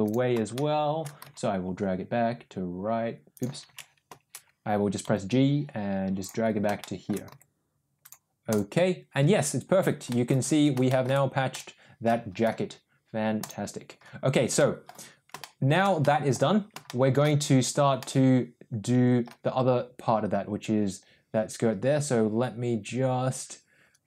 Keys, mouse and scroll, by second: 13.4 click, 14.5-14.9 middle drag, 15.4-15.7 shift+middle drag, 15.9-16.3 middle drag, 16.8-17.1 shift+middle drag, 17.9-18.5 middle drag, 18.6 middle click.